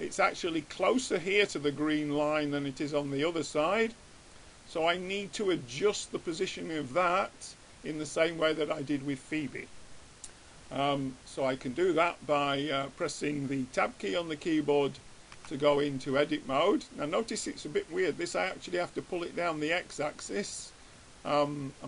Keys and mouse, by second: 2.0-5.1 middle drag, 6.9 click, 8.3-10.5 middle drag, 11.7-13.7 middle drag, 15.6 Tab, 19.5-21.1 drag.